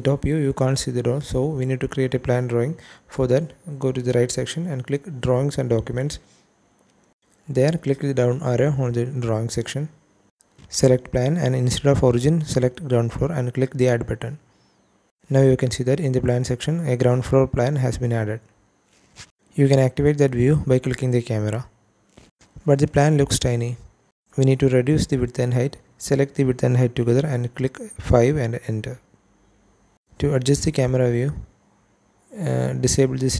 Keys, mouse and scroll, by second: 0.1-0.4 scroll down 2, 0.4 middle click, 2.1 shift+middle click, 6.2 click, 8.1 click, 10.6-11.4 drag, 12.7 click, 14.0 click, 15.0 click, 19.7 click, 24.3-27.5 drag, 28.3-29.1 scroll down 1, 29.1 click, 33.0 click.